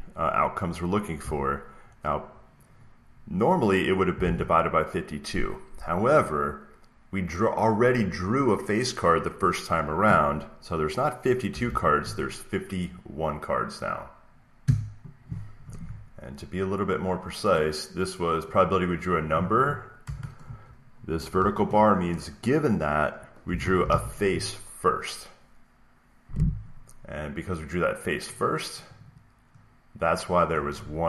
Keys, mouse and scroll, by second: 1.1 typing, 3.9-4.6 typing, 11.4 BackSpace, 11.5 1, 14.5 Return, 17.4 click, 18.4 click, 18.6 click, 19.1 click, 23.3-24.3 typing, 28.4 click, 28.9 click, 29.0 click, 30.4 click.